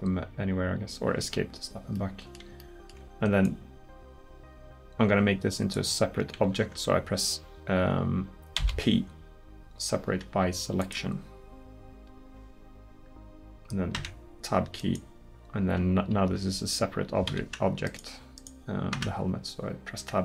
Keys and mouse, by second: 2.0 middle click, 6.4 ctrl+z, 8.6 p, 14.0 Tab, 16.3 w, 19.0 Tab.